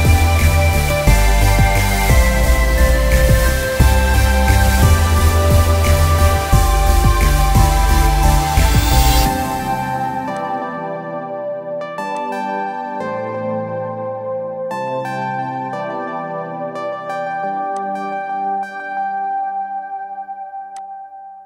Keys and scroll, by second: 0.3 ctrl+z, 1.2 ctrl+=, 1.3 ctrl+=, 2.7 ctrl+=, 5.1 [, 5.4 [, 5.7 [, 7.2 ctrl+=, 7.7-8.2 ctrl+=.